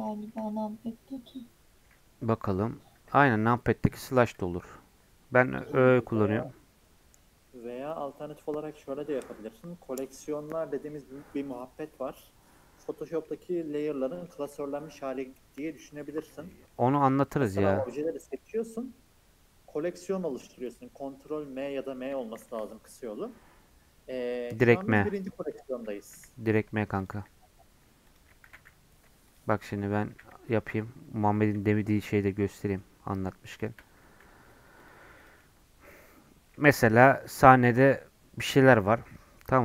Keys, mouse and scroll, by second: 2.5 KP_Divide, 3.0 KP_Divide, 3.4 KP_Divide, 3.9-13.0 middle drag, 13.0 scroll down 1, 13.2-16.2 middle drag, 16.4 middle click, 17.0-17.7 scroll down 6, 17.7-18.1 scroll up 2, 18.1 scroll down 4, 18.4-20.6 middle drag, 20.6 click, 20.9 scroll up 1, 21.1 scroll down 1, 21.3 middle click, 21.6 scroll up 1, 21.9 middle click, 22.4 shift+a, 26.0 g, 27.2 s, 28.5 shift+d, 29.6 middle click, 30.1 shift+d, 32.2-33.6 middle drag, 33.6 shift+click, 33.9 g, 35.2 click, 35.4-39.0 middle drag, 39.0 scroll down 2, 39.1 middle click.